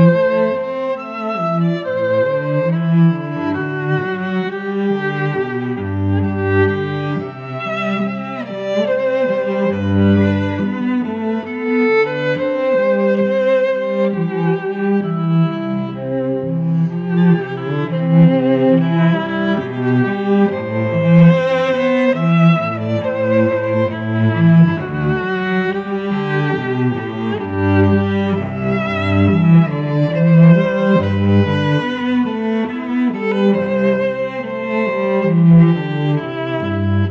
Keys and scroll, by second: 0.2-5.1 typing, 5.7 ctrl+t, 8.1 Return, 8.3 v, 8.6 shift+Down, 8.8 shift+Right, 9.1 shift+Down, 9.3 shift+Right, 9.8 shift+Down, 10.0 shift+Right, 10.2 shift+Down, 10.3 shift+Right, 10.6 shift+Down, 11.3 shift+Right, 11.6 shift+Down, 12.1 alt+Up, 13.7 t, 16.2-20.8 typing, 20.6 ctrl+Return, 21.1 shift+Right, 22.7 Up, 22.9 shift+Left, 25.5 Tab, 25.9 space.